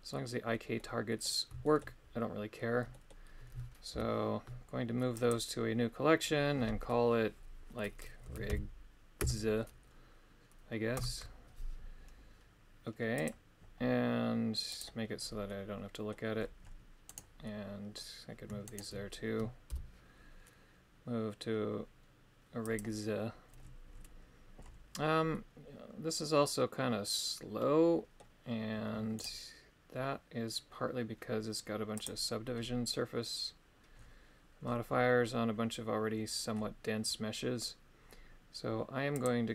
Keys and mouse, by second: 0.7 middle click, 1.7 shift+middle click, 2.9 middle click, 3.9 m, 14.7 click, 15.4 middle click, 17.4 middle click, 18.8 shift+right click, 19.8 m, 25.3-28.2 middle drag, 29.3 right click, 39.1 click.